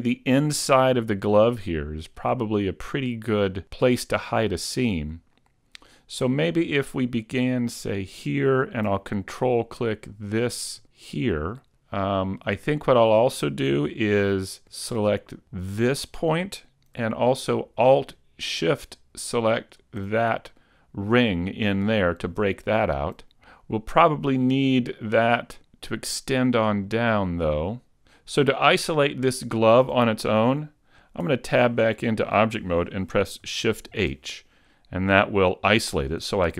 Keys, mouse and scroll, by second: 7.9 right click, 10.1 ctrl+right click, 11.3 middle click, 11.3 scroll up 2, 15.7 ctrl+right click, 19.5 alt+shift+right click, 20.1-20.7 scroll down 1, 20.7 middle click, 20.7 scroll down 1, 26.7-27.2 scroll up 2, 27.2 middle click, 31.3 Tab, 33.9 shift+h.